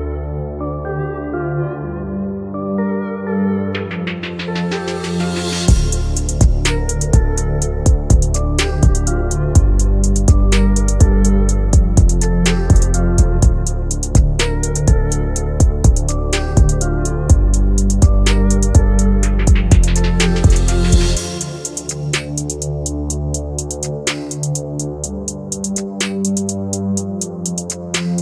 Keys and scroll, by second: 19.0 Delete, 20.5 shift+F2, 20.8 Escape.